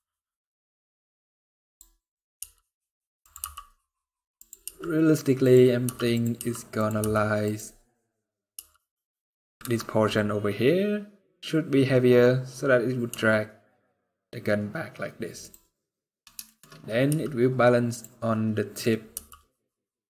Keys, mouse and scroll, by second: 1.0 click, 1.7 scroll up 2, 2.1 r, 3.1 g, 4.4 r, 5.6 g, 6.1 r, 6.7 g, 8.3 r, 12.8 r, 16.2 shift+middle click, 16.4 scroll up 1, 16.8 r, 18.9 g.